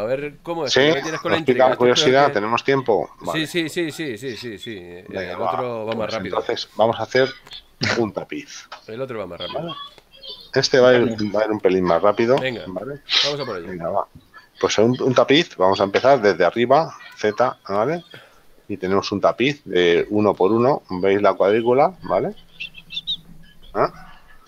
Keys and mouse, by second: 3.9 click, 8.6 click, 16.3 KP_7, 17.3 z.